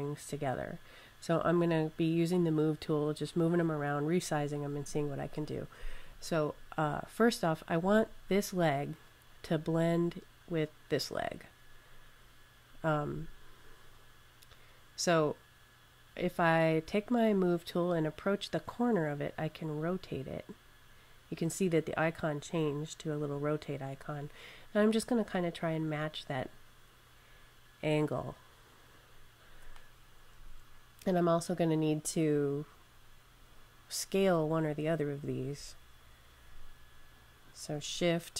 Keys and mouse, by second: 0.0 click, 19.4 click, 21.9 click, 22.1 click, 27.7 click, 34.3 click, 37.3 click.